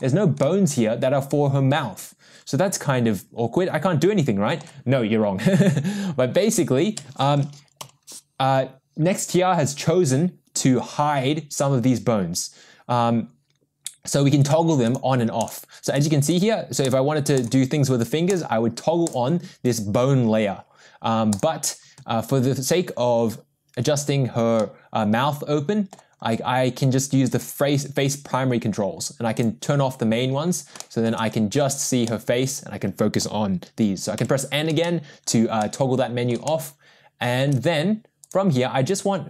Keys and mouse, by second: 0.4-4.6 middle drag, 4.6 click, 7.8 n, 14.4 click, 14.8 click, 15.4 click, 16.0 click, 16.3 click, 16.8 click, 18.3 click, 19.0 click, 21.3 click, 24.5-25.9 middle drag, 27.4 click, 29.4 click, 30.8 shift+middle drag, 32.0-33.2 middle drag, 34.2 n, 34.8-35.3 shift+middle drag, 35.6-36.3 middle drag, 36.4-37.4 shift+middle drag, 38.2 click, 38.9 click.